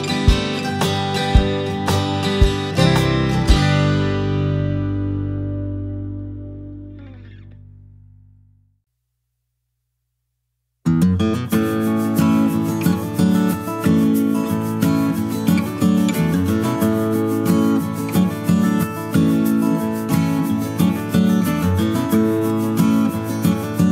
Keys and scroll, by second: 4.3 space, 12.8 space.